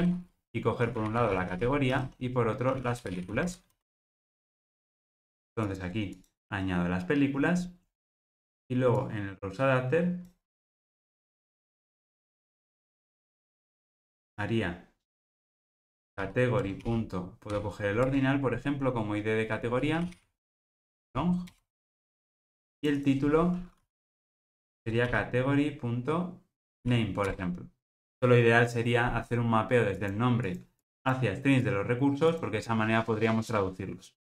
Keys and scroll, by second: 10.6 super+c, 27.4 Return.